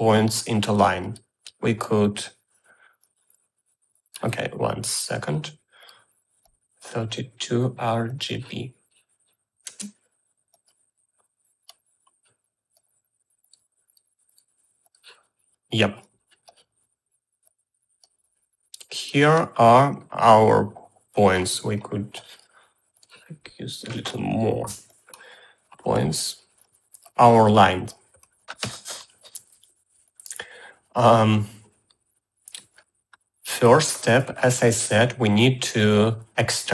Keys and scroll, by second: 10.3 space, 25.3 0.